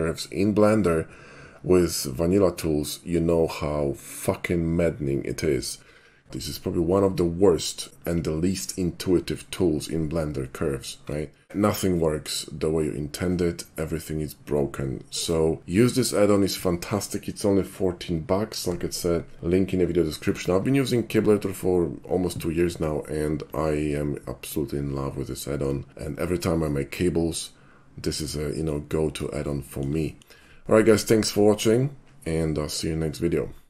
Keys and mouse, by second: 26.6-28.7 middle drag, 29.5-29.9 shift+middle drag, 30.1 shift+middle click.